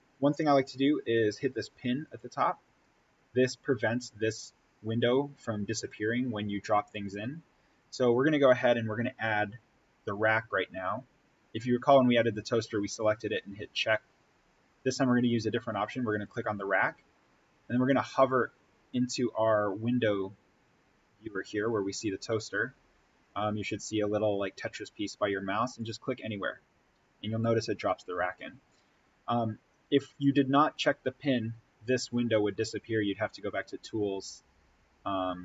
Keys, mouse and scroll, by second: 1.9 click, 12.8 click, 16.0 click, 25.7 click.